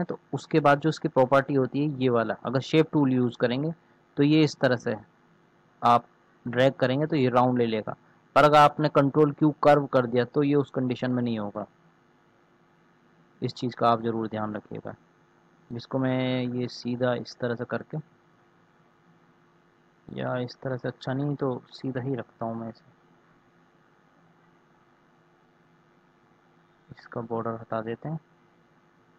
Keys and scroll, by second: 20.5 ctrl+z, 21.5 ctrl+z.